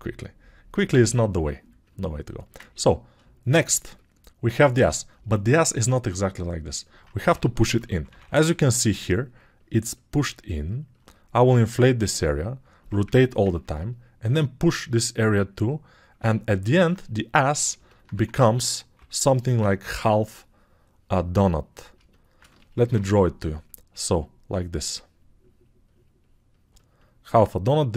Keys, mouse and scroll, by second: 19.5 [, 22.9 ctrl+shift+7.